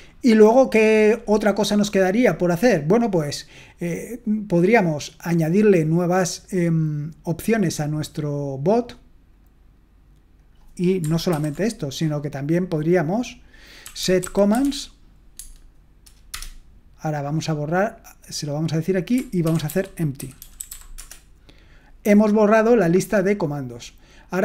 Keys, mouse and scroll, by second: 14.0-15.1 typing, 15.3 Tab, 16.3 Return, 19.4-21.2 typing.